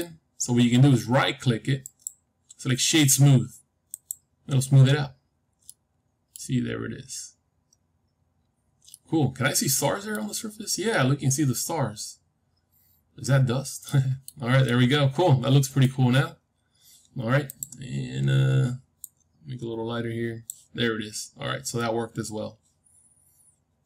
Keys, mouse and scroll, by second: 1.8-3.8 right drag, 4.7-7.6 middle drag, 8.6 scroll down 1, 8.8-10.8 middle drag, 10.8-11.6 scroll up 1, 11.6-16.6 middle drag, 17.4-19.4 drag, 21.4-22.2 scroll down 1, 22.2-22.7 scroll down 1, 22.7 middle click.